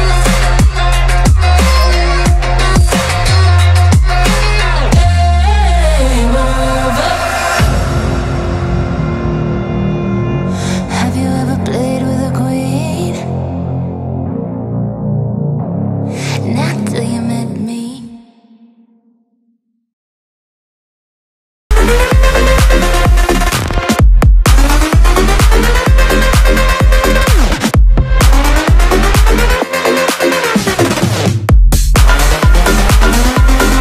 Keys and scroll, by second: 3.2 space, 5.4 shift+a, 21.5 KP_Decimal, 24.6 KP_Decimal, 25.5 KP_0, 26.3 KP_0, 29.0 KP_0.